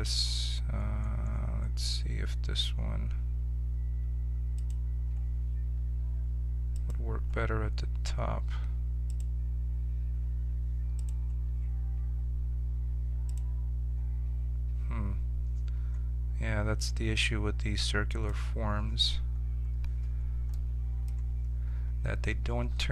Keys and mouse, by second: 4.5-15.7 drag, 15.7-18.0 middle drag, 18.0-20.0 drag, 20.0 middle click.